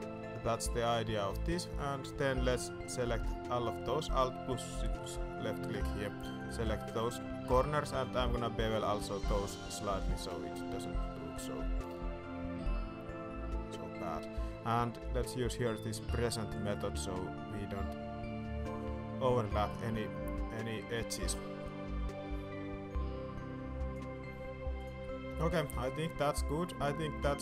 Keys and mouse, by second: 0.8 Tab, 1.3 middle click, 1.6 shift+middle click, 1.9 Tab, 2.2 alt+a, 2.4 alt+click, 3.0 middle click, 4.8 alt+shift+click, 6.8 click, 7.0 shift+click, 7.7 shift+click, 8.2 ctrl+b, 15.4 click, 16.7-23.9 drag, 24.7 click, 25.0 middle click, 25.8 shift+click, 26.3-27.4 middle drag.